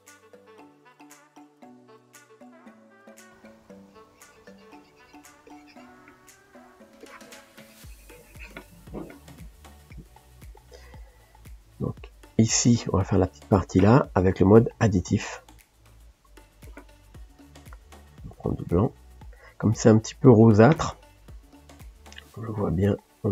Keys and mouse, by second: 1.0 f, 2.7-6.3 drag, 6.3 shift+middle click, 7.0-10.0 drag, 10.0-16.7 middle drag, 16.7-18.4 drag, 20.4 click.